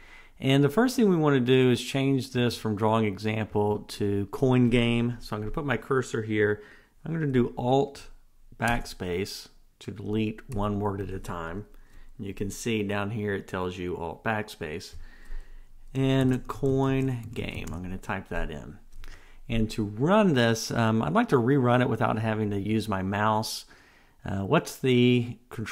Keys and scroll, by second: 8.9 alt+BackSpace.